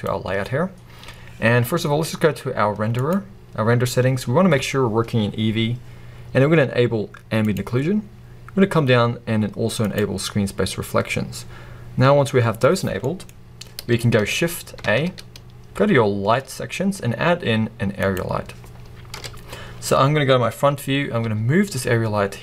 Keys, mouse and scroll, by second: 0.0 click, 0.7-1.4 scroll down 1, 1.4-3.4 scroll down 1, 7.5-13.1 drag, 13.1-22.4 middle drag, 13.4 scroll up 1, 18.2 shift+a, 19.2 KP_1, 19.9-21.3 scroll down 1, 21.3 g.